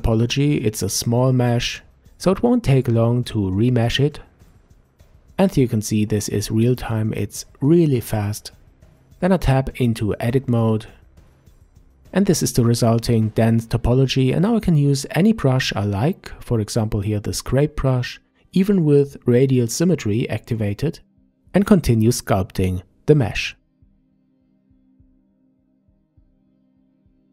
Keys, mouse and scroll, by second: 7.8-8.7 middle drag, 8.7-10.2 scroll up 1, 10.2 Tab, 11.9 Tab, 13.6 click, 14.1 scroll up 2, 15.1-18.1 drag, 20.8-27.3 drag.